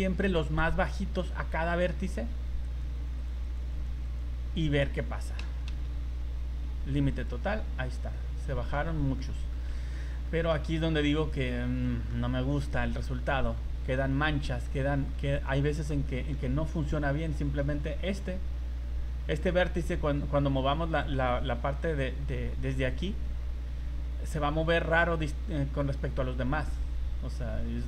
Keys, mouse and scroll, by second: 2.7 right click, 3.2 right click, 3.4 right click, 3.7 right click, 4.0 right click, 5.4 a, 5.9 a, 7.1 click, 8.1 middle click, 9.2 middle click, 9.6 scroll up 1, 9.9 shift+middle click, 10.3 middle click, 10.7 scroll up 2, 11.3 right click, 11.8 shift+middle click, 12.7 z, 13.1 z, 13.9 middle click, 15.5 middle click, 16.1 shift+middle click, 16.4 middle click, 17.0 scroll up 3, 17.3 shift+middle click, 17.7 middle click, 20.7 scroll down 2, 26.7 middle click, 27.0 middle click, 27.5 scroll down 2, 27.7 middle click.